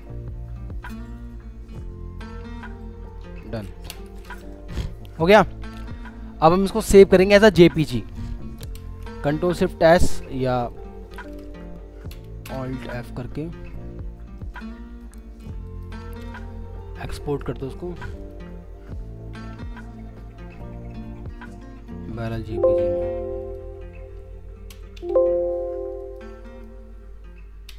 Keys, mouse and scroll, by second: 1.0 shift+click, 3.9 Return, 4.1 space, 6.4 Return, 11.2 alt+f, 11.3 alt+e, 12.1 Down, 12.4 Return, 24.7 Right, 25.0 2.